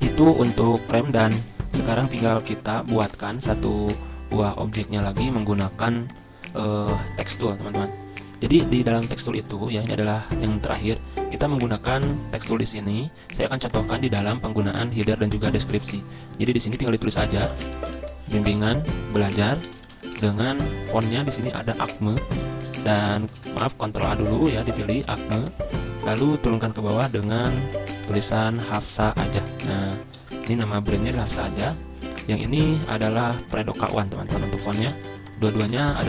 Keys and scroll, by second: 3.3 ctrl+z, 13.4 z, 17.5-20.0 typing, 20.3 Escape, 23.3 ctrl+a, 27.5 ctrl+a, 28.3-30.5 typing, 31.5 ctrl+a, 34.6-36.0 typing.